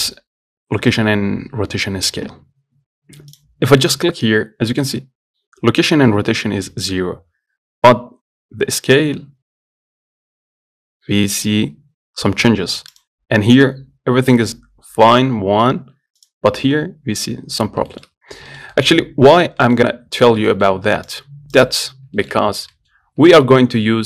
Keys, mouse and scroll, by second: 3.6 click, 4.1-6.8 shift+middle drag, 13.2 click, 16.4 click, 17.9 scroll down 2, 18.1 shift+middle click, 18.5 scroll down 1, 18.7 shift+middle click, 19.6 scroll up 1, 19.8 middle click, 20.2 scroll down 2, 20.5 shift+middle click, 21.3 click, 21.8 click, 22.2 scroll down 2, 22.4 shift+middle click, 22.6-23.5 scroll up 3, 22.9 middle click, 23.5-24.0 shift+middle drag.